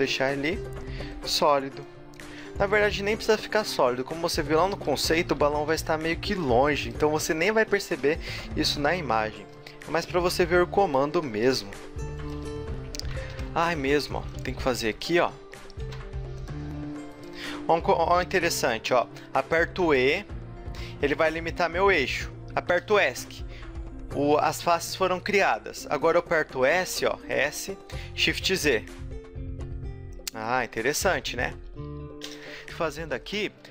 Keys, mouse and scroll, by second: 2.1 middle click, 2.6-3.2 scroll up 3, 3.5-7.0 typing, 4.7 middle click, 5.0-5.7 scroll down 4, 8.6 o, 9.6 s, 9.6 z, 9.8 middle click, 10.2 g, 11.2 middle click, 11.6 s, 12.3 a, 13.2 KP_1, 13.6-14.1 scroll up 3, 14.1 ctrl+r, 15.1 a, 15.5 middle click, 15.8 ctrl+Tab, 17.1 alt+shift+right click, 19.5 e, 25.9 shift+middle click, 26.9 s, 30.6 a, 30.6 middle click, 31.7 KP_1, 32.4-33.7 right drag, 32.8 ctrl+r, 32.9 g.